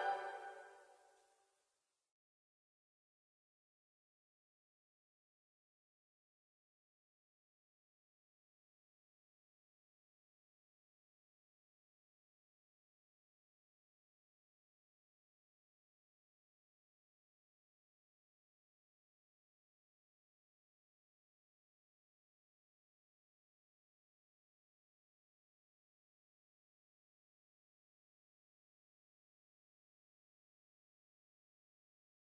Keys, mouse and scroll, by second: 8.9 click, 16.2 Down, 21.0 Down, 25.6 Down.